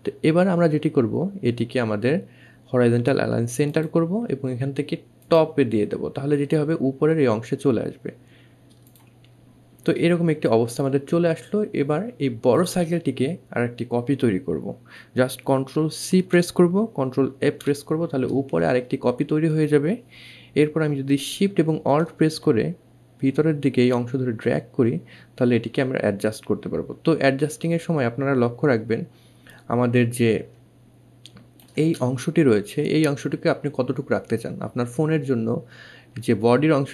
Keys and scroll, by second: 15.2 ctrl+c, 16.5 ctrl+f.